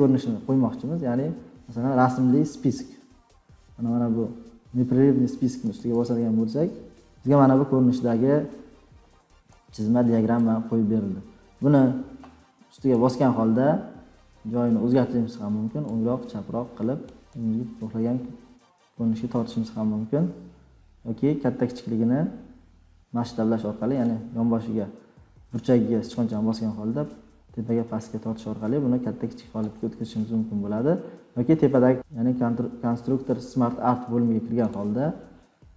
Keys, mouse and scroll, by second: 0.7-1.2 scroll, 2.4-3.4 scroll, 5.7 click, 6.0 click, 10.4 click, 15.8 click, 17.1-18.5 drag, 19.4-20.7 drag, 24.0 click, 29.5 click.